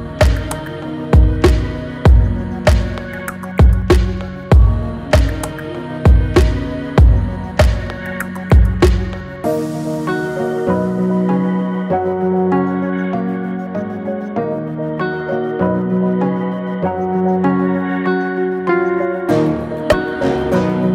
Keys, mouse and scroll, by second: 1.3 right click, 1.7 Tab, 2.4 shift+a, 4.2-5.3 scroll down 10, 5.3 r, 9.7 alt+middle click, 10.0 alt+middle click, 10.2-11.0 alt+scroll up 12, 11.0-11.3 shift+middle drag, 11.3 scroll down 1, 12.4 s, 15.7 scroll down 1, 16.0-16.4 scroll up 8, 16.4-17.0 shift+middle drag, 17.0 g, 20.0 Tab.